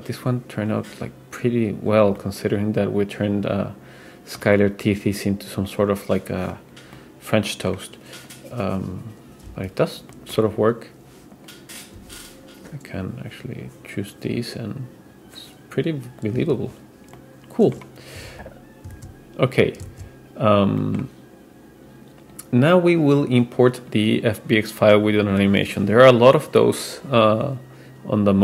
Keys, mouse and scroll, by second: 2.2-4.5 middle drag, 5.0-6.8 drag, 7.0-7.8 middle drag, 8.3-9.8 drag, 10.1 middle drag, 11.4 click, 12.0 g, 16.8-17.2 scroll down 2, 17.2-17.9 middle drag, 18.5 super+z, 20.1 super+z, 20.8 middle click, 22.2 click, 23.1 click, 23.8 drag, 25.2-28.4 drag.